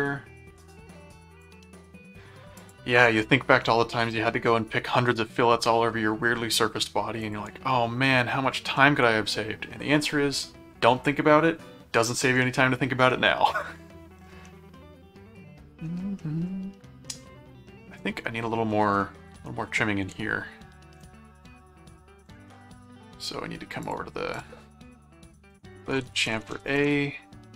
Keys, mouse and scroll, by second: 1.4 click, 2.6 click, 7.2 ctrl+click, 7.6 ctrl+6, 8.6 ctrl+7, 13.5 click, 14.4-15.5 middle drag, 16.2 middle click, 17.9 middle click, 18.7 middle click, 20.1 ctrl+Tab, 22.4 middle click, 23.8 click, 25.2-27.1 typing.